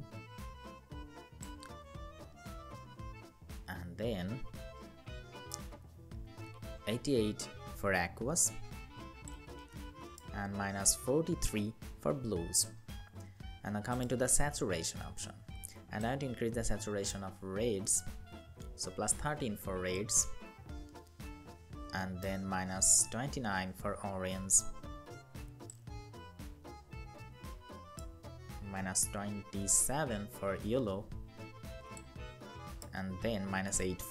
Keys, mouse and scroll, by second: 5.4 Up, 5.6 Up, 5.8 Up, 6.1 Up, 6.6 Down, 10.3 Down, 10.8 Down, 17.1 Up, 17.8 Up, 22.0 Up, 22.3 Up, 27.8 Up, 28.0 Up, 28.2 Up, 28.5 Up, 28.9 Up, 29.3 Up, 32.8 Down.